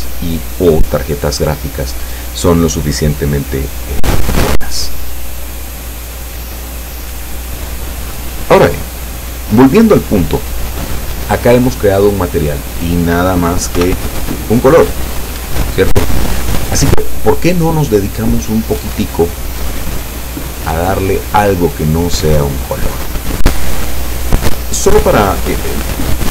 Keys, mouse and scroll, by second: 13.8 p, 15.4 Escape, 24.2 click.